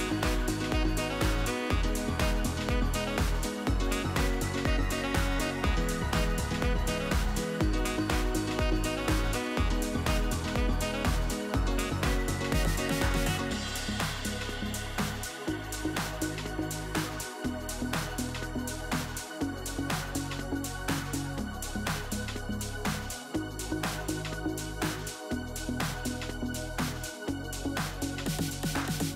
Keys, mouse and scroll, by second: 0.5 click, 1.1-3.7 shift+click, 4.2-4.9 middle drag, 4.9 shift+click, 5.7 s, 6.7 KP_7, 7.6 g, 9.3 ctrl+z, 9.9 shift+click, 10.7 s, 13.9-15.2 middle drag, 15.2 Tab, 15.6 Tab, 16.0-17.5 middle drag, 18.3 click, 18.8 e, 21.0 click, 21.8 KP_3, 22.0 KP_1, 23.1 click, 24.1-24.4 right drag, 24.4-24.8 scroll up 1, 24.8-25.4 shift+middle drag, 25.4 click, 26.8 click, 28.8 shift+click.